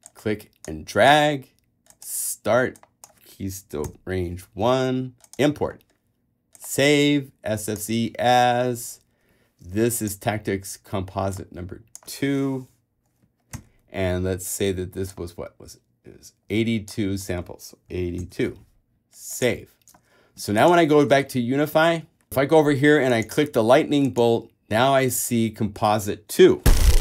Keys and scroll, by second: 4.0 l, 13.7 2, 18.1 8, 18.4 2, 21.3 alt+super+Tab, 21.9 super+Tab.